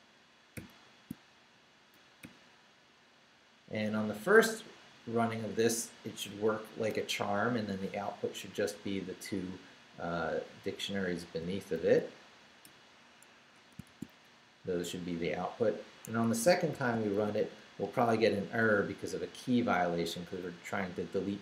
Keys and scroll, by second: 0.0-0.5 typing, 1.9 shift+BackSpace, 3.9 Left, 11.0 Down, 11.8 shift+v, 12.6 shift+BackSpace, 13.3 Escape, 13.8 shift+v, 14.1 shift+Down, 14.9 Down, 16.0 Escape, 16.7 shift+;, 17.1 shift+w, 17.8 Return, 20.1 Up.